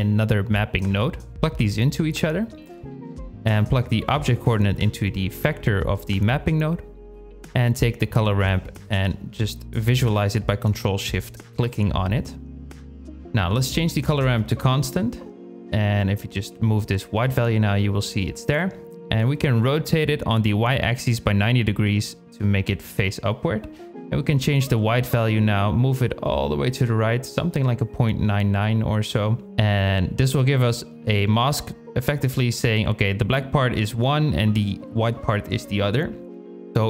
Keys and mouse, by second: 0.0 click, 0.7-1.4 drag, 1.9 click, 3.5-5.3 drag, 6.6 click, 8.2 ctrl+shift+click, 12.9-14.2 drag, 14.8-15.3 drag, 17.5 shift+click, 18.3-20.5 drag, 22.9-29.9 drag, 30.5 middle click, 32.1 KP_Divide, 33.6-35.4 drag, 35.4 middle click, 35.8 click.